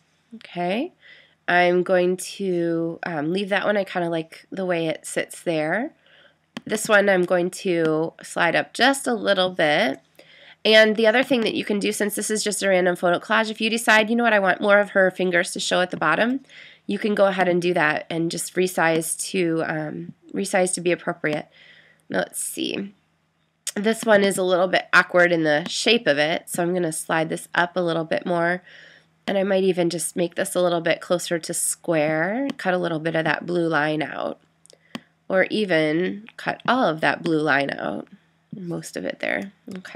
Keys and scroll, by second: 9.8 Return, 39.8 Return.